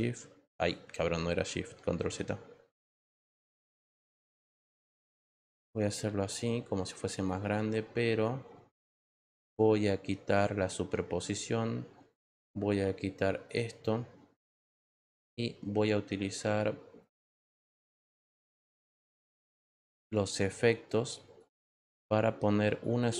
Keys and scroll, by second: 2.0 ctrl+z.